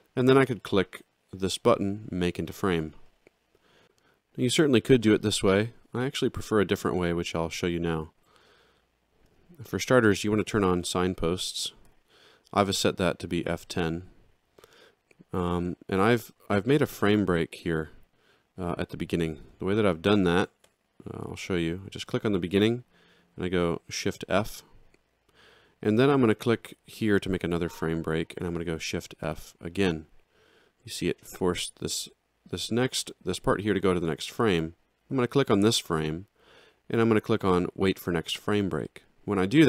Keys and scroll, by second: 8.0 ctrl+z, 11.9 F10, 20.6 Delete, 24.3 shift+f, 28.7 shift+f.